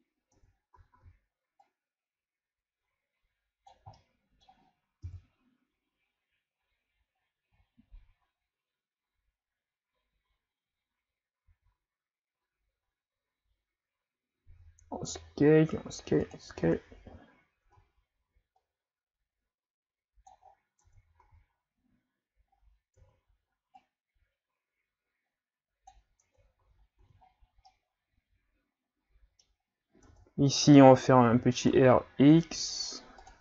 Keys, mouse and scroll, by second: 0.4 Tab, 0.8 a, 1.0 a, 1.7-4.0 drag, 4.0-5.0 middle drag, 5.0 KP_1, 7.1 scroll down 2, 7.7 scroll up 1, 11.5 s, 16.6 Tab, 17.6 Tab, 18.6-20.4 drag, 20.4-20.8 scroll down 4, 20.8 Tab, 21.2 a, 21.5-22.4 scroll down 2, 22.5 scroll up 4, 23.0 Tab, 23.8-26.2 drag, 26.2 Tab, 26.6 a, 27.0 a, 27.3-27.7 scroll down 3, 27.7-29.6 middle drag, 29.6-30.1 scroll up 3, 30.1 Tab, 31.3 r.